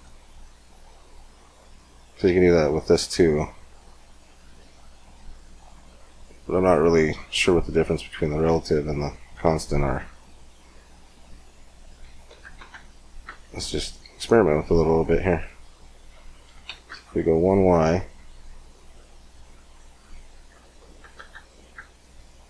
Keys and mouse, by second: 0.4-7.0 drag, 0.4 middle click, 7.2 middle click, 8.0-13.2 drag, 13.2-15.5 middle drag, 15.5-17.3 drag, 18.5-21.6 drag, 21.6 middle click.